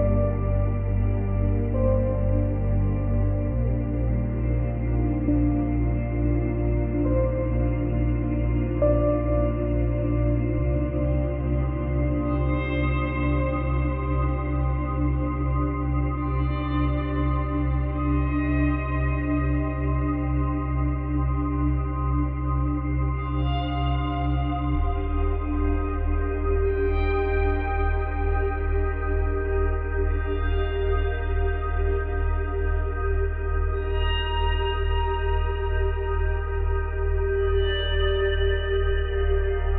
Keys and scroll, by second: 2.4 space, 8.9 space, 23.5 space, 27.1 space, 37.6 space, 38.5 space.